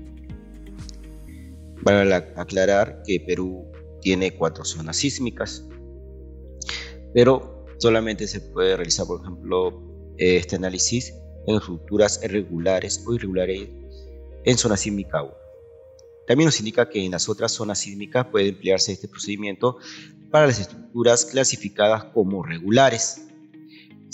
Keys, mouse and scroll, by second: 1.7-4.0 ctrl+drag, 8.0 Escape.